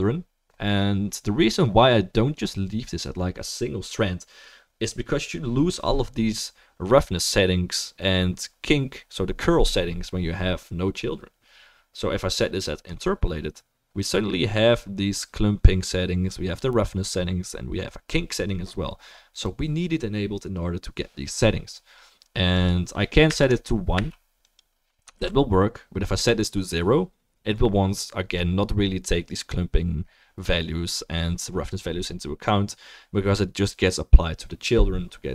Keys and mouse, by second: 1.5-13.0 drag, 22.7-24.6 drag, 22.7-24.6 middle drag, 25.2 ctrl+s.